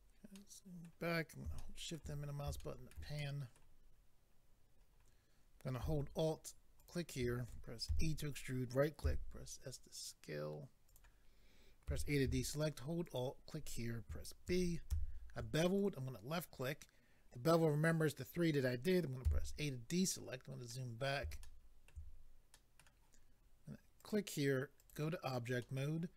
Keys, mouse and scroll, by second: 0.3 middle click, 0.3-0.9 scroll down 3, 1.6 shift+middle click, 1.9 middle click, 2.2 scroll down 2, 2.6 shift+middle click, 3.2 middle click, 3.8-4.1 scroll up 3, 4.8-5.1 scroll up 2, 6.8 alt+click, 6.9 alt+click, 7.9 e, 8.3 right click, 9.0 s, 10.9 click, 11.9 a, 13.0 alt+click, 14.4 ctrl+b, 15.8 click, 19.2 a, 19.7-20.2 scroll down 1, 20.2-20.9 scroll down 5, 20.7 middle click, 21.4 shift+middle click, 21.9 middle click, 22.5 middle click, 24.0 click, 24.1 click, 24.8 click, 24.9 click, 25.6 middle click.